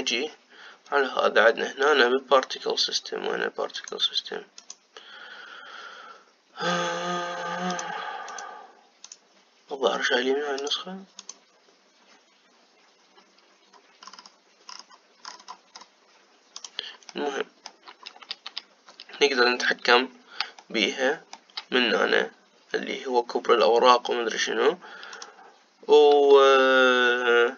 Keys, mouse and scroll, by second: 0.2 click, 4.4 click, 5.3 click, 8.4 click, 9.0 click, 9.8-11.3 drag, 11.9 click, 14.7-15.9 scroll down 10, 15.9-17.2 scroll up 6, 17.2 click, 17.8-20.8 middle drag, 21.3-24.4 shift+middle drag, 25.8 click.